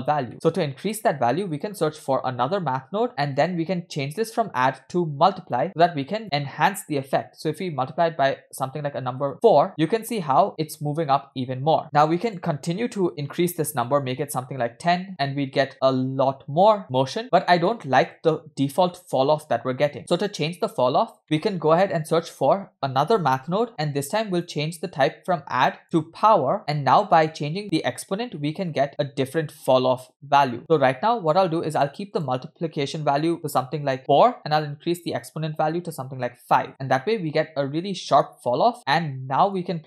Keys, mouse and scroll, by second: 0.5 middle click, 0.5 scroll down 1, 0.8 shift+a, 4.2-7.5 drag, 9.2 space, 11.8 middle click, 11.8-12.3 scroll down 2, 11.8 space, 12.3-13.8 drag, 14.8 space, 15.7 space, 16.8 space, 20.0 space, 21.3 middle click, 21.3 shift+a, 25.0-26.6 drag, 27.1-31.8 drag, 32.2-34.0 drag, 35.2-36.7 drag, 36.7 space, 39.6-39.8 drag.